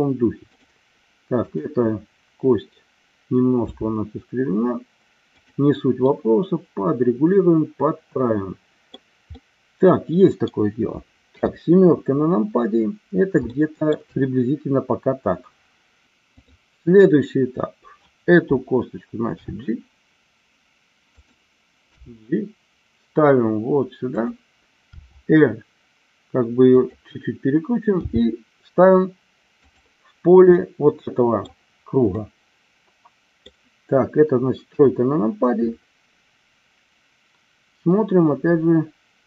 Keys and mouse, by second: 1.5 click, 3.7 r, 5.3 click, 6.1-9.1 middle drag, 9.5-10.6 middle drag, 11.3 KP_7, 13.6 shift+middle click, 16.4 click, 19.4 r, 21.1 click, 21.9 g, 24.9 r, 26.8 click, 28.0 g, 29.7 click, 30.7 middle click, 32.2-33.5 middle drag, 34.7 KP_1.